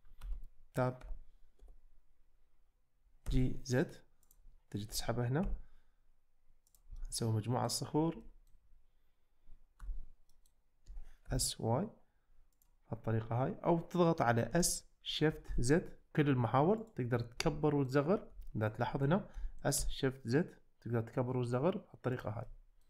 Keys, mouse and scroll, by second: 0.3 Tab, 1.0 f, 1.6 g, 3.3 z, 4.9 g, 5.5 x, 7.0-7.9 middle drag, 8.3 shift+middle drag, 9.8 Tab, 10.3 middle click, 10.9 s, 11.3 y, 12.6 click, 14.5 s, 15.5 shift+z, 17.6 middle click, 18.5 shift+middle click, 18.8 middle click, 19.3 s, 19.8 shift+z, 22.6 middle click.